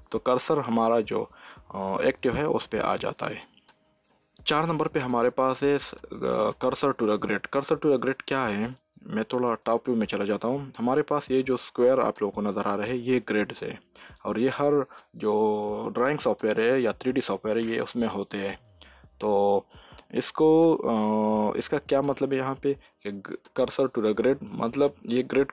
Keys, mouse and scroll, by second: 3.0 shift+s, 9.4 click, 23.5 click, 23.8 shift+s.